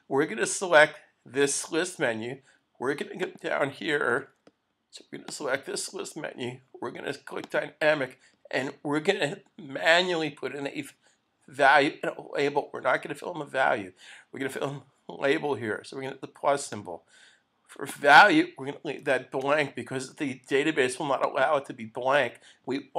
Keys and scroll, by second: 4.2 super+s.